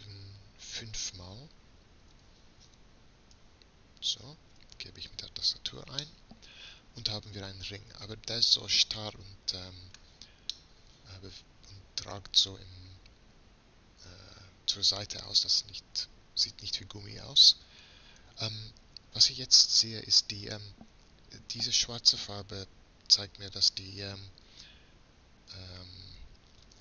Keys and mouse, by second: 6.1-7.9 middle drag, 10.6 middle click, 11.9 middle click, 17.8 a, 18.2 a, 18.7 a.